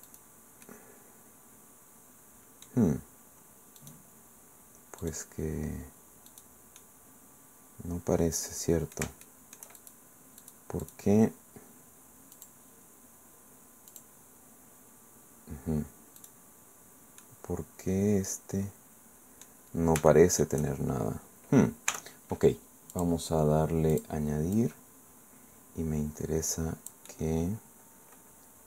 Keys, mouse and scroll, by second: 0.1 middle click, 0.6-2.8 middle drag, 3.2-3.8 scroll up 1, 3.8 right click, 5.0 middle click, 6.3 middle click, 6.8-9.7 middle drag, 9.7 shift+click, 10.4 middle click, 10.8 middle click, 12.3 click, 13.9 middle click, 14.1 click, 16.2 right click, 17.2-19.6 drag, 19.8 scroll up 1, 20.1 shift+click, 21.9 t, 22.9 click, 23.9 click, 24.5-28.6 drag.